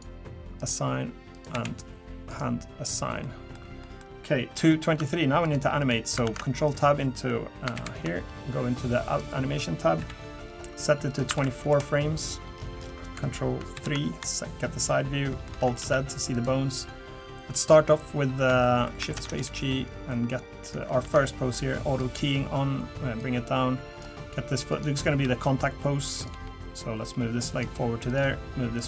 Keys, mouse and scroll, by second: 0.6 click, 1.3 click, 1.5 l, 2.3 click, 2.8 click, 3.2 middle click, 3.8 middle click, 4.5-5.0 scroll down 1, 5.0 Tab, 5.4 click, 5.8 click, 6.2 ctrl+Tab, 6.7 click, 7.7 ctrl+KP_3.